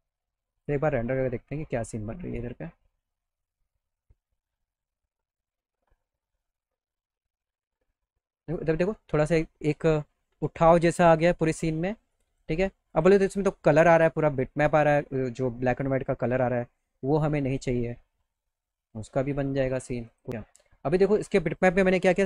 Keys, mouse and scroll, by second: 0.5 click, 7.1 middle click, 12.2 click, 12.9 click, 16.4 click, 17.7 middle click, 18.0 middle click, 20.1 click, 21.2 click.